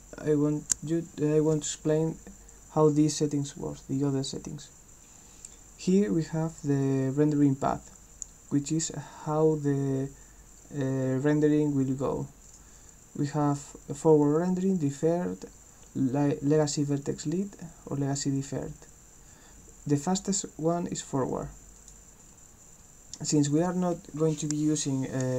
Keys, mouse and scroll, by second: 12.4 click, 21.8 click.